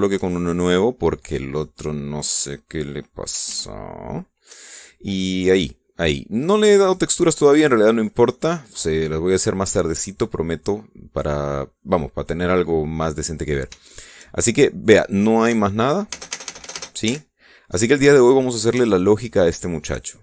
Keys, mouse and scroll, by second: 0.3 scroll up 1, 0.6-2.1 shift+drag, 2.2-3.3 drag, 4.2 alt+a, 5.2 Escape, 5.7-6.0 scroll down 2, 6.2 scroll up 2, 7.6 click, 8.6 scroll down 2, 9.0-12.2 middle drag, 12.4 scroll up 2, 14.0 scroll down 2, 14.5 shift+click, 16.1 p, 16.8 space, 18.5-18.8 scroll down 2, 19.0-19.3 scroll up 2, 19.6-20.2 shift+drag.